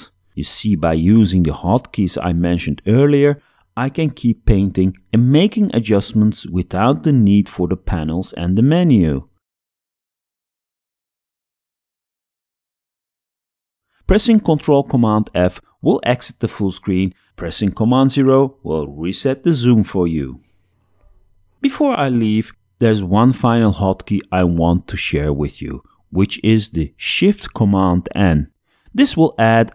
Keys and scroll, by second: 0.2 alt+Tab, 4.0 b, 7.4 Tab, 7.5 space, 8.9 x, 10.1 space, 11.5 Tab, 14.1 ctrl+super+f, 17.9 super+Tab, 18.6 super+0, 26.4 shift+super+n.